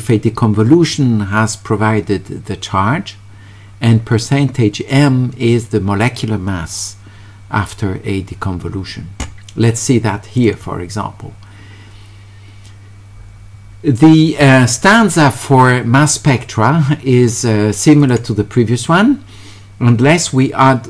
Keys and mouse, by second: 10.4 click, 16.0-17.5 drag, 18.0 click.